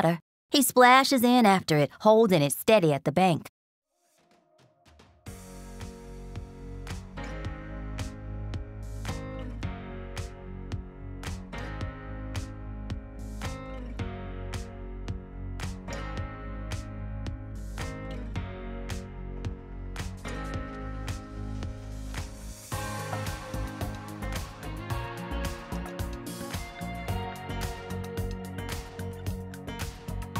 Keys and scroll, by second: 2.4 r, 3.6 space, 3.9 r, 6.9-8.4 typing, 9.8 t, 13.0 b, 17.5 s, 17.9 t, 22.4 3, 23.5-24.3 typing, 24.5 Return, 25.4 b, 27.2-29.7 typing.